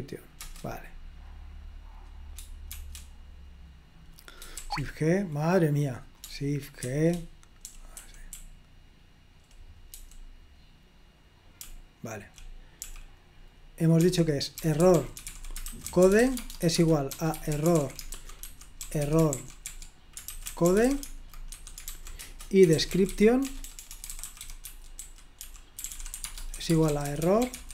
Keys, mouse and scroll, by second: 0.5 Return, 2.8 shift+f, 4.9 shift+g, 7.0-10.1 typing, 11.6-27.7 typing.